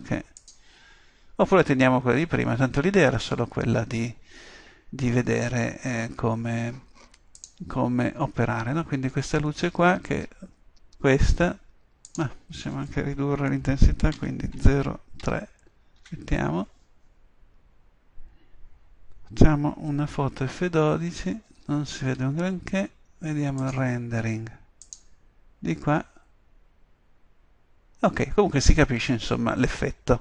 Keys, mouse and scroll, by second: 12.1-14.0 drag, 22.1 F12, 22.1 Escape, 26.3-29.6 middle drag.